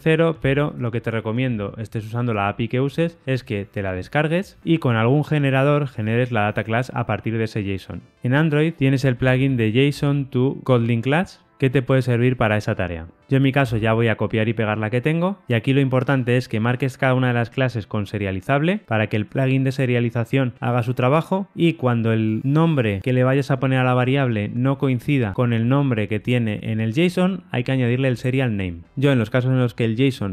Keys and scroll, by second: 13.6 super+v.